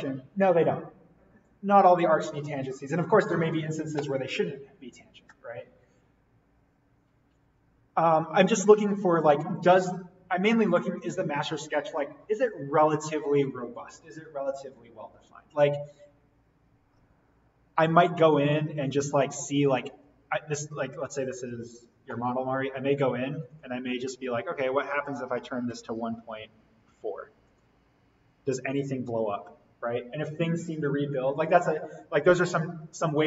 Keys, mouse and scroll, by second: 18.3 right click, 19.9 click, 22.6-23.3 scroll down 1, 23.3 click, 25.3 1, 26.9 4, 27.5 click.